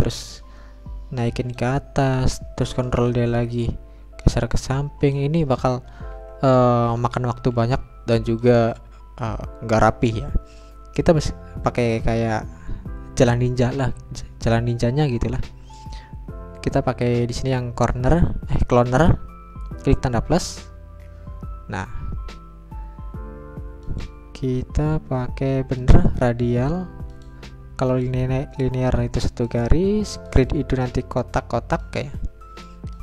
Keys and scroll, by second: 2.9 ctrl+d, 6.1 Delete, 9.1 Delete.